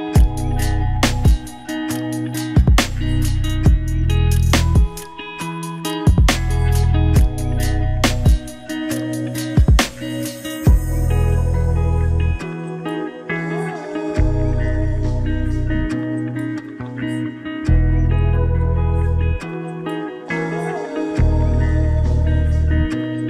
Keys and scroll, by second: 3.2 ctrl+g, 9.8 ctrl+-, 12.2 ctrl+=, 20.2 ctrl+=.